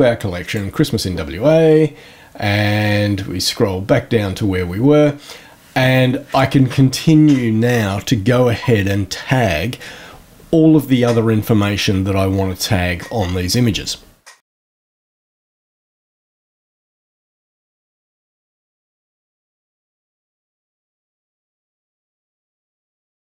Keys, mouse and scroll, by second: 0.4 click, 1.8-3.2 scroll down 5, 3.5-3.8 scroll up 2, 3.8 scroll down 2, 4.1 scroll up 1, 6.2 click, 14.3 click, 14.5 right click, 14.6-17.2 typing, 14.6 click, 15.2 click, 15.6 click, 15.8 click, 16.5 click, 17.4 click, 18.1 click, 18.3 l, 18.8 click, 19.2 l, 19.3 BackSpace, 19.6 Left, 19.7 Right, 20.1 click, 20.4 right click, 20.5 click, 20.7 click, 21.0 scroll down 1, 21.2 scroll up 1, 21.3-22.7 scroll down 8, 23.0 scroll up 2, 23.2 shift+click.